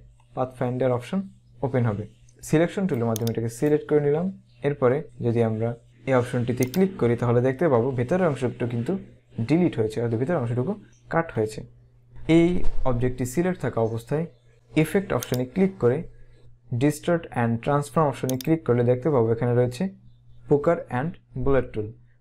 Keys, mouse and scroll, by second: 2.3 click, 6.8 click, 15.4 click, 18.5 click.